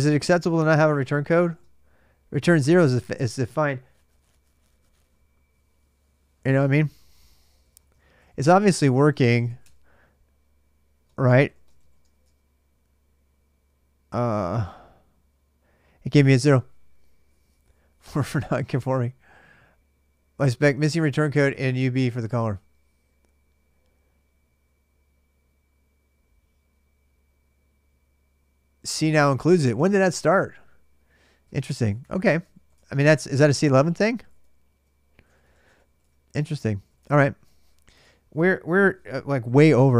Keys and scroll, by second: 0.0-1.9 typing, 6.8-12.2 typing, 14.1 shift+h, 14.2 Return, 31.3-37.7 typing, 37.7 alt+Tab.